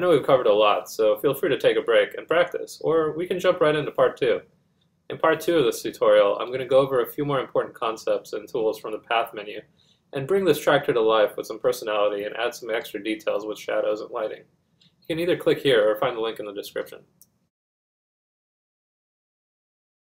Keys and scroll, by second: 13.3 Return.